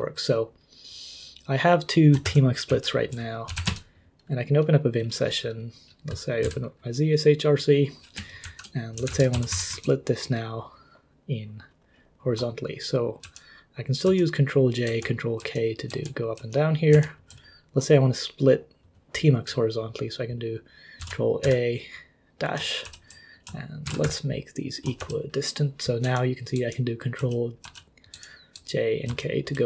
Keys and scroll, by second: 2.2 ctrl+h, 2.7 ctrl+l, 3.2-4.1 typing, 6.4 z, 8.4-10.0 typing, 13.2 ctrl+j, 14.1 ctrl+k, 14.1-15.3 typing, 15.4 ctrl+k, 15.9 ctrl+j, 16.4 ctrl+k, 16.9 ctrl+j, 21.0 ctrl+a, 21.4 -, 22.8 ctrl+k, 23.9 ctrl+w, 24.0 =, 25.0 ctrl+k, 26.0 ctrl+j, 26.5 ctrl+j, 27.2 ctrl+k, 28.1 ctrl+j, 29.1 ctrl+k.